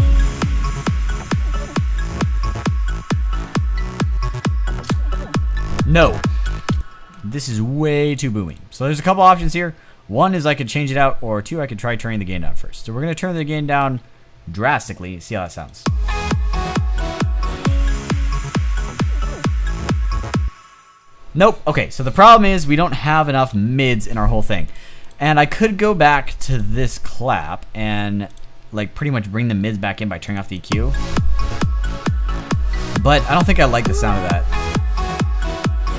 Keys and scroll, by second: 6.3 space, 20.0 space, 23.1 Delete.